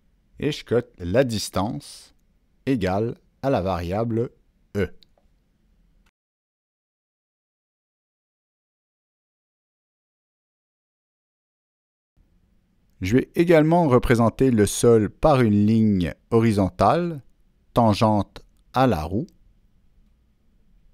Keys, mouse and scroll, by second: 1.5 click, 2.8 right click, 3.0 click, 3.7 click, 4.9 click, 5.9 Down, 5.9 click, 6.2 Down, 6.2 Return, 6.2 click, 6.8 Return, 8.7 click, 9.6 Escape, 10.6 click, 11.5 Escape, 11.5 click, 13.0 ctrl+click, 13.2 ctrl+Escape, 14.5 click, 15.6 click, 18.8 right click, 20.5 click.